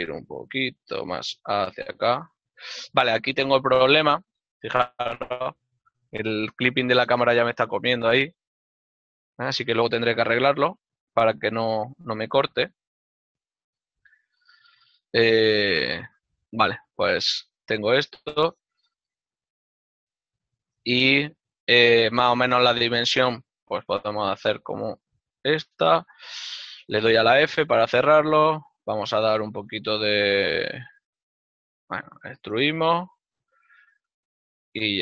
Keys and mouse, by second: 19.4 right click, 20.0 l, 23.1 ctrl+middle click, 25.7 click, 27.7 ctrl+Tab.